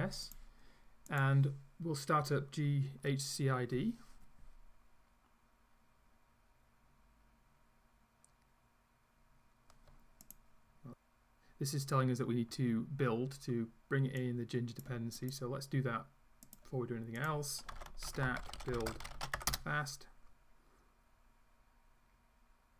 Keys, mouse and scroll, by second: 0.3 click, 1.1 click, 10.3 click, 14.3 click, 15.3 click, 16.5 click, 17.2 scroll up 1, 17.4-19.9 typing.